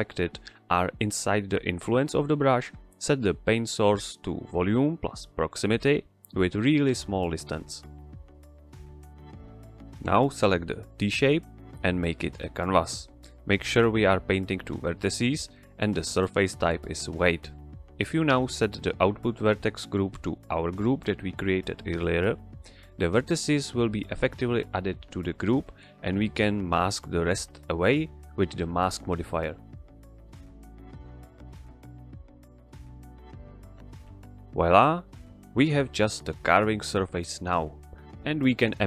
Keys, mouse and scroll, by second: 1.4 click, 6.2 Return, 9.7 click, 14.9 scroll down 1, 15.8 click, 20.6 scroll down 1, 22.5 ctrl+click, 23.4 click, 27.6 click, 30.8 click.